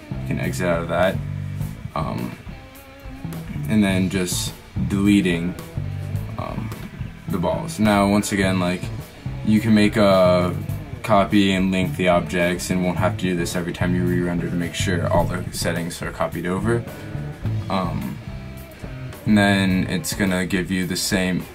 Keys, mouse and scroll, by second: 3.7 x, 6.5 x, 12.8 middle click, 17.6-18.9 drag.